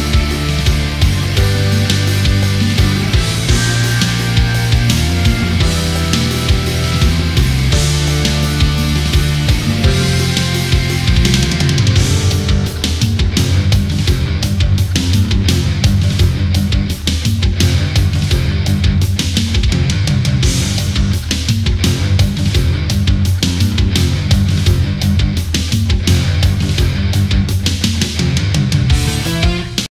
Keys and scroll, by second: 8.1 ctrl+[, 13.4 ctrl+0, 15.3 ctrl+0.